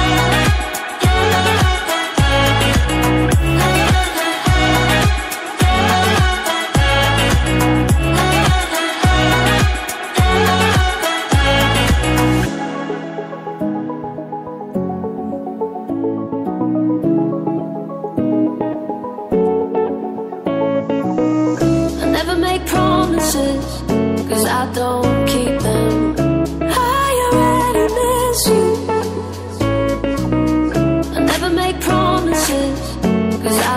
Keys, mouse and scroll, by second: 1.2 right click, 2.4 click, 7.7 click, 11.7 click, 12.8 click, 15.0 click, 15.3 double click, 17.5 typing, 19.5 scroll up 1, 21.1-22.1 typing, 23.3 click, 23.9 ctrl+c, 24.1 ctrl+v, 25.0 click, 26.3 ctrl+click, 26.4 ctrl+double click, 26.5 ctrl+a, 27.1-28.1 typing, 29.6-33.5 typing.